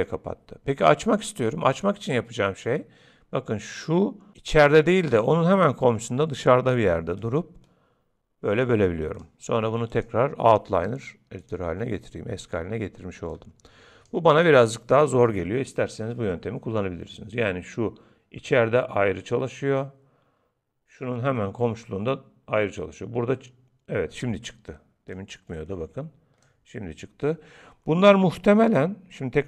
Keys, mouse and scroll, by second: 7.2 click, 9.9 click, 13.3 click, 25.1 click.